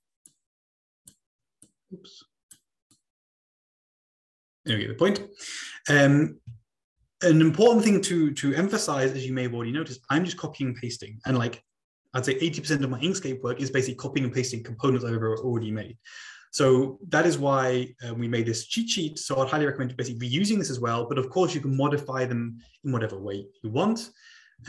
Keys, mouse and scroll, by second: 1.1 click, 1.8 click, 2.9-4.7 drag, 7.0-7.8 scroll down 3.